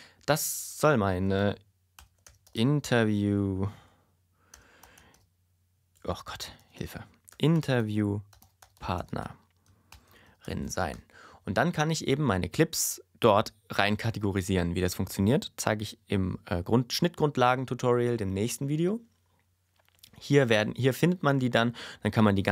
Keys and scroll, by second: 1.7-10.9 typing.